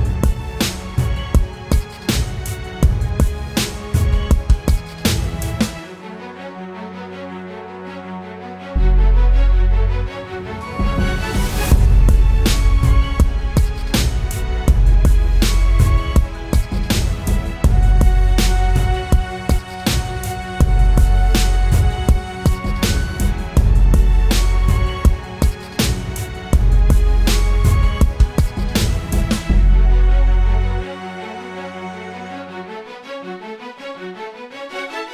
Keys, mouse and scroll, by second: 1.2 Return, 1.7 Down, 1.9 Down, 2.3 Right, 2.6 Up, 3.2 Left, 3.5 Right, 3.9 Left, 4.6 ctrl+t, 5.4 alt+shift+click, 7.3 Return, 7.6 Up, 7.9 Up.